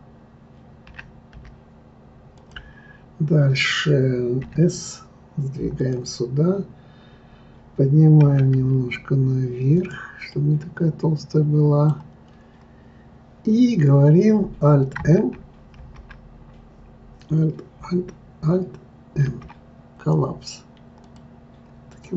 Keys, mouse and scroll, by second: 0.9 e, 4.4 s, 8.2 g, 10.3-12.4 middle drag, 12.4 scroll up 2, 15.8 alt+m, 19.2 alt+m, 21.9 click.